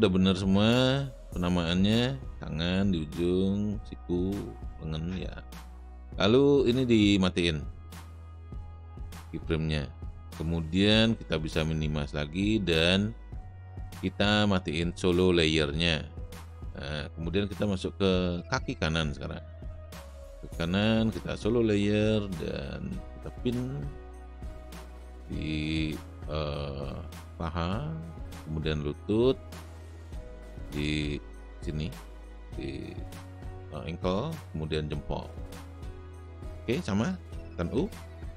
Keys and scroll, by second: 22.4 space, 37.8 u.